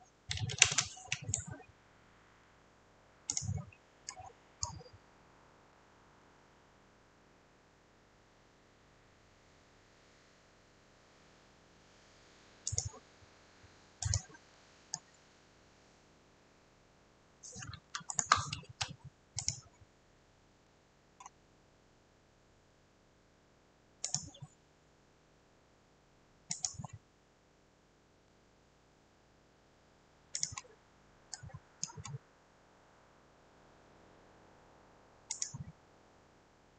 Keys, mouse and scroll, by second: 0.1-1.1 typing, 2.3 click, 2.3 click, 2.4 click, 2.6 scroll, 3.4 click, 3.6 scroll, 4.7 scroll, 5.8-6.3 scroll, 12.8 click, 14.2 click, 15.0-15.4 scroll, 18.1 scroll, 18.2 shift+middle click, 19.9 scroll, 20.9-21.5 scroll, 24.3 click, 24.7 scroll, 26.7 click, 26.9-27.7 scroll, 28.3 scroll, 28.9 scroll, 30.5 click, 30.6 scroll, 31.9-32.3 scroll, 35.5 click.